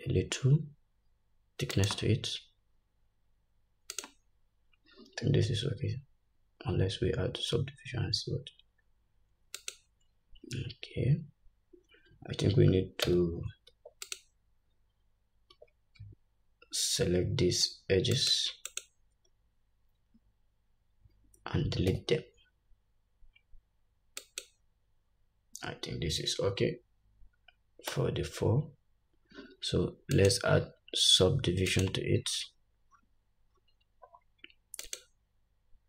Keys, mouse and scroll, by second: 6.0-6.9 scroll up 1, 6.9-7.3 scroll down 1, 13.2 Tab, 13.8 Tab, 14.2 click, 15.7 Tab, 18.3 alt+shift+click, 18.8 alt+shift+click, 22.0 x, 28.0 Tab, 30.2-35.8 drag, 33.0-33.6 scroll down 2, 33.7-34.0 scroll down 3.